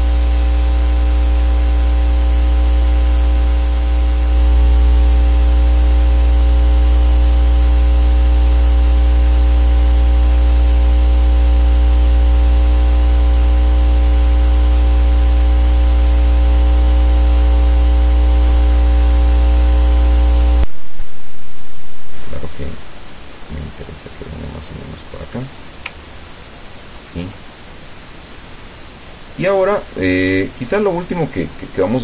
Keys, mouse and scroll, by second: 1.4 ctrl+shift+click, 5.2 click, 6.4 click, 7.7-12.3 drag, 14.6 click, 15.9 click, 17.3 click, 19.4-21.2 drag, 22.3-26.0 drag, 26.5-27.4 ctrl+scroll down 2, 29.7 click.